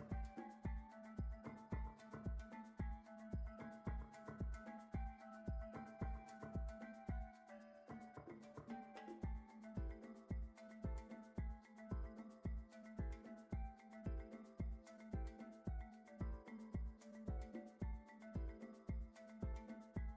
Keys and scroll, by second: 0.6 shift+a, 2.4 n, 2.8 m, 2.9 a, 3.0 l, 3.6 Down, 5.6 Return, 14.0 shift+a, 15.9 c, 16.2 o.